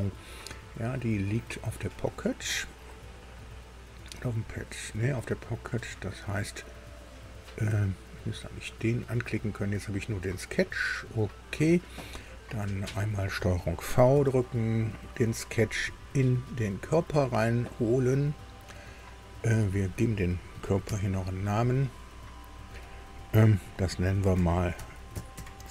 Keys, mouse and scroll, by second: 8.2 click, 11.0 click, 13.0 click, 14.1 ctrl+v, 15.4-16.9 drag, 19.6 click, 20.8 F2, 24.5-25.7 typing.